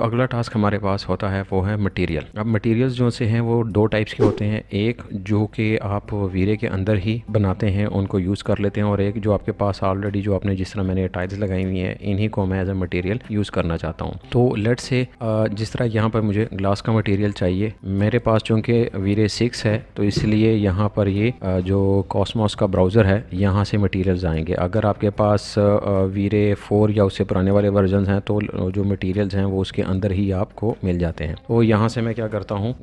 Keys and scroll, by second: 32.2-32.8 typing.